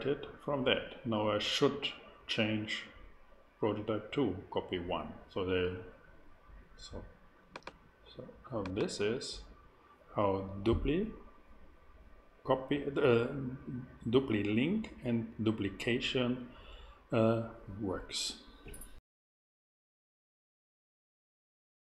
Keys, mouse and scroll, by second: 7.5-9.8 drag.